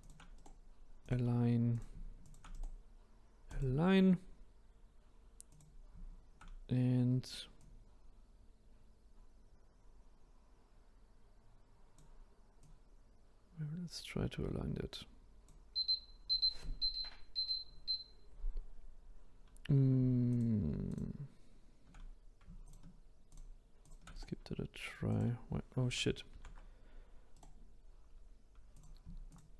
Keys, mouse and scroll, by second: 0.0 shift+click, 0.3-1.7 right drag, 1.7 click, 2.2 shift+click, 2.5-4.6 right drag, 4.6-5.5 scroll up 2, 5.5 click, 7.6 click, 12.6 click, 20.3 shift+click, 20.8 shift+click, 22.6-24.1 shift+drag, 24.1-26.3 right drag, 26.3 ctrl+z, 27.3-28.7 right drag, 28.7 click, 29.3 shift+click.